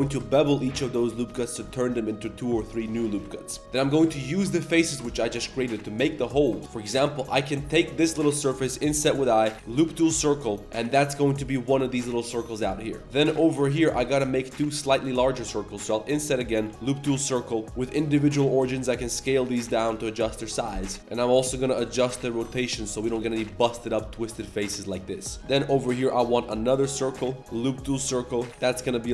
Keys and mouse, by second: 0.1 ctrl+b, 3.8 click, 4.3 ctrl+shift+click, 6.9 click, 7.5 ctrl+shift+click, 8.6 i, 9.5 w, 10.4 s, 13.8 shift+click, 14.6 ctrl+shift+click, 15.8 i, 16.6 w, 17.6 r, 17.7-18.3 drag, 18.6 s, 20.7 shift+middle click, 21.0 ctrl+KP_Add, 21.0 r, 22.1 click, 22.3 shift+click, 22.5 r, 23.0 ctrl+KP_Add, 23.8 r, 25.2 r, 25.4 3, 26.4-28.8 typing.